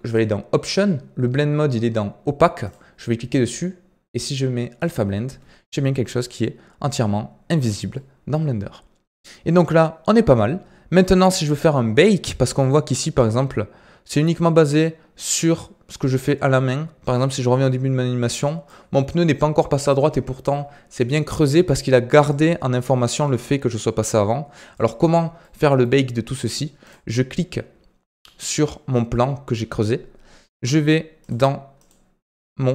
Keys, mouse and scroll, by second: 0.0 click, 2.6-5.6 drag, 6.2-7.7 drag, 7.7 scroll down 3, 7.9-9.3 middle drag, 9.3-11.0 scroll down 2, 11.0-13.2 middle drag, 13.2-16.2 drag, 22.3-25.2 drag, 25.3-26.8 middle drag, 26.8 click, 31.1 click, 31.7 click.